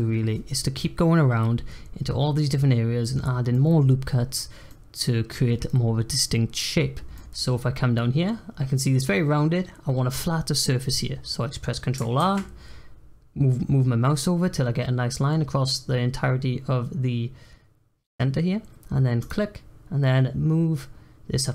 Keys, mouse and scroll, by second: 2.5-7.8 middle drag, 7.8-9.5 scroll up 1, 9.5-10.9 scroll up 1, 12.1 ctrl+r.